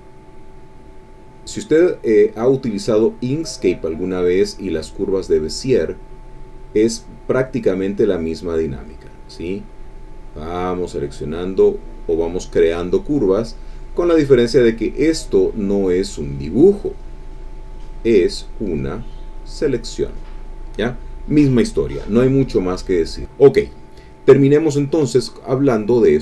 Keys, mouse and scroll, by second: 1.0 click, 1.4 click, 2.8 click, 3.8 click, 4.6 click, 5.3 click, 6.1 click, 6.8 click, 7.4 click, 8.2 click, 9.8 click, 10.7 click, 11.5 click, 12.2 click, 13.0 click, 13.6 click, 14.2-17.0 drag, 17.0-19.1 drag, 19.2 click, 22.9 click, 23.4 middle click, 23.6 click, 24.1 middle click, 24.2 click, 24.7 click.